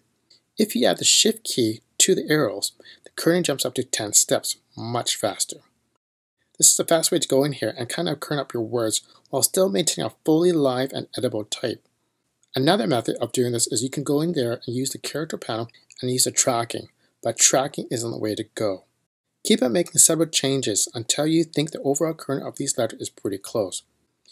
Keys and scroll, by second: 15.9 v.